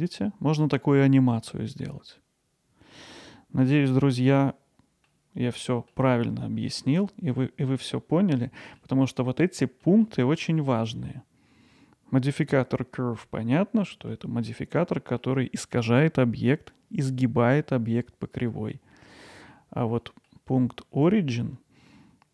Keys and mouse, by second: 3.8 middle click, 5.1-6.0 middle drag, 7.4-7.8 middle drag, 8.4-8.8 middle drag, 9.2 middle click, 9.8 middle click, 10.3 middle drag, 13.4 middle click, 14.4 middle click, 15.2-15.8 middle drag, 16.2 middle drag, 18.7-19.5 middle drag, 20.0 middle drag.